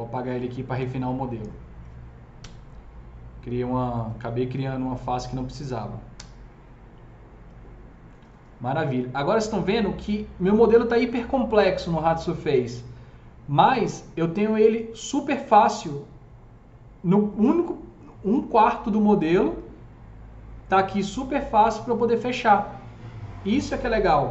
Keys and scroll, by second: 2.3 Delete, 6.1 Delete.